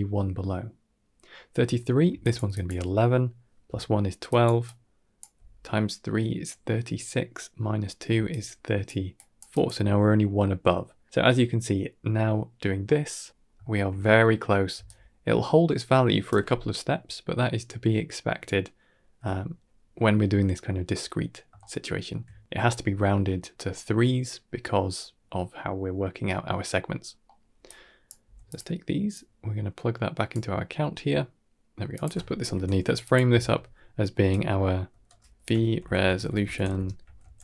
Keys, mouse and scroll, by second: 1.9-5.1 typing, 2.1 click, 2.4 click, 4.1 click, 4.5 click, 7.9-9.5 typing, 8.2 click, 9.0 click, 9.4 click, 12.9 middle click, 13.3 scroll down 1, 13.5 shift+middle click, 14.6 d, 14.7-16.1 right drag, 21.5-22.0 shift+middle drag, 23.7-24.1 middle drag, 24.3 shift+middle click, 27.0 scroll down 1, 27.1 middle click, 27.5-28.0 drag, 28.1 g, 29.0-30.2 drag, 30.4 middle click, 30.8-31.2 scroll down 2, 31.5 g, 32.3 ctrl+j, 33.0 click, 33.2 F2.